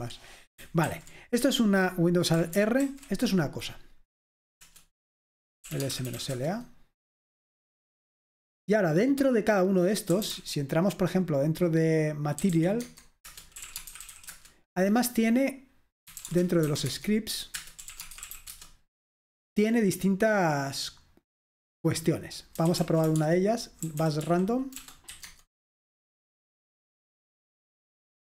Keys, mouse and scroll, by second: 0.0 Escape, 0.9 ctrl+c, 3.0 alt+super+r, 4.8 Return, 5.6-6.9 typing, 10.0-10.8 typing, 12.3-14.6 typing, 13.3 Return, 16.0-18.9 typing, 17.6 Return, 22.4-25.3 typing, 26.9 Return.